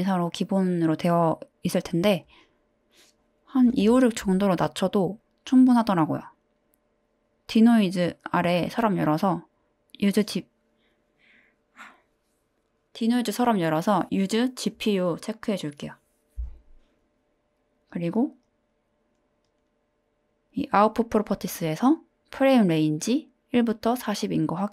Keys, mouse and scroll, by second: 2.5-4.5 drag, 6.2 click, 15.0 click, 15.5 click, 17.8 click, 18.4 click.